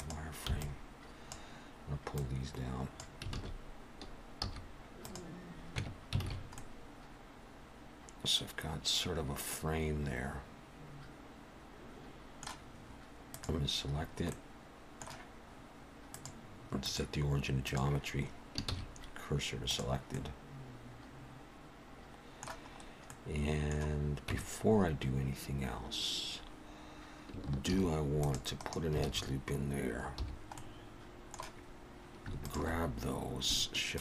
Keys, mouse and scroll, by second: 0.5 b, 2.1 click, 3.3 alt+a, 4.4 z, 5.8 Tab, 6.2 alt+a, 6.5 middle click, 13.3 click, 14.0-14.6 scroll down 2, 14.3 middle click, 16.1 click, 18.6 shift+s, 20.1 middle click, 22.8-23.2 scroll up 2, 23.1 middle click, 24.3 Tab, 27.7 ctrl+r, 29.1 alt+a, 30.2 3, 30.6 middle click, 32.4 alt+shift+click.